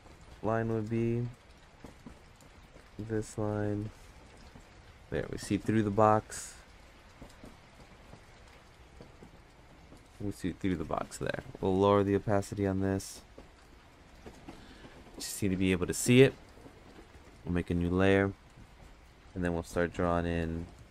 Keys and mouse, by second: 0.0 click, 0.3 click, 0.6 click, 1.9 click, 2.1 click, 2.3 click, 3.1 click, 6.8 click, 7.1 click, 7.3 click, 8.0 click, 8.4 click, 9.5 click, 9.7 click, 9.8 click, 11.8-14.5 drag, 17.1 click, 19.6 click.